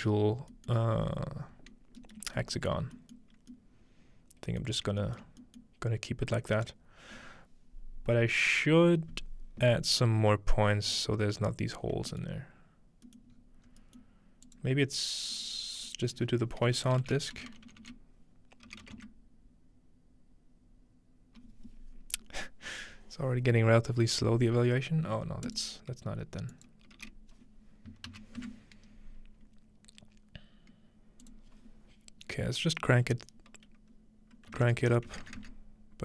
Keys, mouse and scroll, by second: 1.3-1.7 scroll up 1, 1.7-3.0 scroll down 2, 4.9 shift+middle click, 5.3 shift+middle click, 6.5-7.6 middle drag, 6.5-8.8 right drag, 10.9 click, 12.3 middle click, 12.4-13.3 scroll down 2, 13.3 scroll up 2, 13.4 middle click, 13.4 scroll, 13.7-14.5 scroll up 4, 14.0-15.8 middle drag, 14.5-15.8 drag, 15.3 right click, 15.9-16.9 drag, 15.9-16.9 right drag, 16.9 BackSpace, 25.5 click, 26.5 click, 31.2 click, 32.6 click.